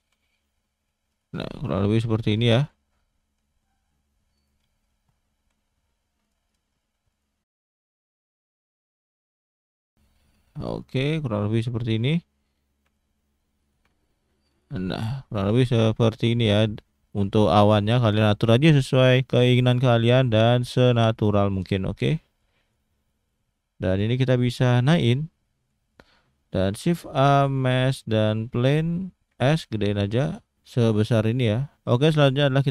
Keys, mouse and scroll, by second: 0.0 g, 1.3 click, 1.7 scroll up 1, 2.0-2.3 scroll down 1, 2.3 click, 3.5 r, 4.7 shift+middle click, 5.4 g, 6.5 click, 6.7-7.1 scroll up 1, 7.1 click, 7.6 click, 8.0 click, 8.9 s, 9.9 g, 10.8 click, 12.0 click, 12.9 shift+d, 13.9 shift+d, 14.7 click, 15.2 click, 15.6 scroll down 1, 15.8 shift+middle click, 16.2-17.1 scroll up 3, 17.1-18.0 scroll down 3, 21.7 middle click, 22.4 click, 23.1 shift+middle click, 23.9 click, 24.7 click, 25.9 click, 26.1 middle click, 26.6 shift+a, 28.4 scroll down 2, 28.7 middle click, 29.3 s, 30.5 shift+middle click.